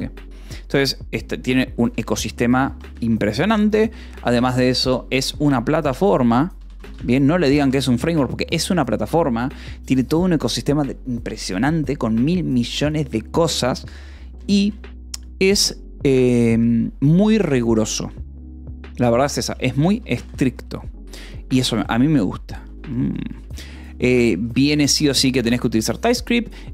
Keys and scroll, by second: 1.7-4.2 typing, 5.2-7.1 typing, 8.2 ctrl+s, 14.3 shift+;, 14.5 :, 14.5 space, 19.4-20.9 typing, 22.2 ctrl+s, 22.4-26.7 typing, 26.0 ctrl+s.